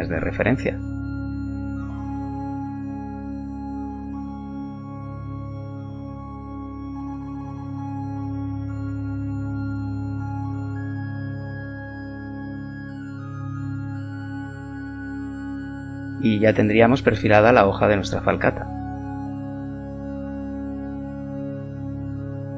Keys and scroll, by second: 0.4 b, 2.4 g, 4.5 b, 14.0 z.